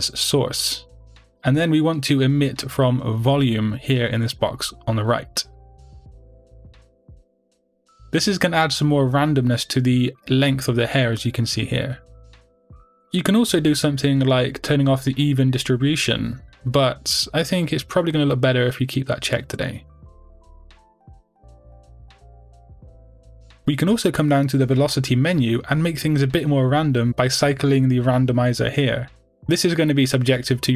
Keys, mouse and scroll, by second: 0.3-7.1 drag, 7.5-9.2 drag, 9.2-17.6 middle drag, 13.8-17.6 scroll down 2, 17.6 click, 18.6 click, 19.2-30.5 middle drag, 24.7-26.0 scroll down 2, 26.0-29.0 scroll down 1, 30.5-30.7 drag.